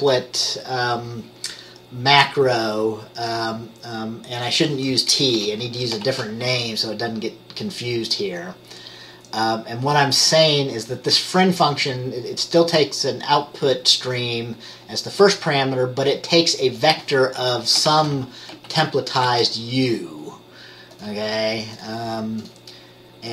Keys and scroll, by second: 5.5 BackSpace, 6.2 u, 18.0-19.4 typing.